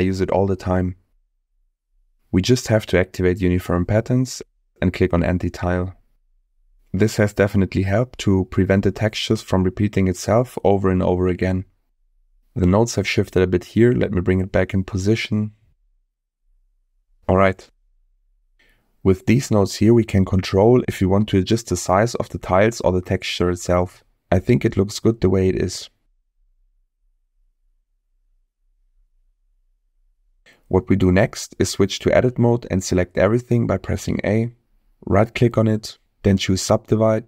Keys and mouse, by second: 2.7 click, 3.1 middle click, 3.7 click, 11.2 middle click, 12.4-15.1 drag, 15.5 click, 16.3-17.5 drag, 18.6 middle click, 19.6 middle click, 24.7-25.8 middle drag, 26.0-26.5 middle drag, 29.9 middle click, 31.3-31.9 middle drag, 34.2 Tab, 35.3 right click.